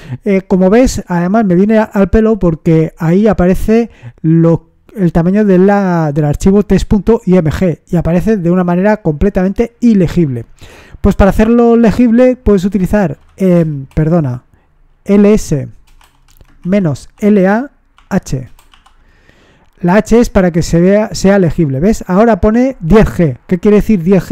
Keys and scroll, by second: 12.5-13.5 typing, 16.1-18.6 typing, 20.5 typing.